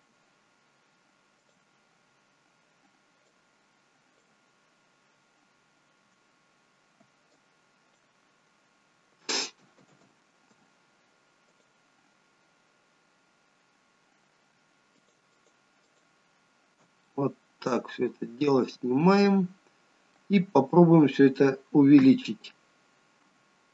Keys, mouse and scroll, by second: 1.4 shift+click, 7.4 alt+click, 9.8 ctrl+z, 11.5 shift+click, 15.0 alt+shift+click, 17.0 middle click, 20.4-22.1 scroll down 1, 22.1-22.8 scroll down 1, 22.1 KP_3.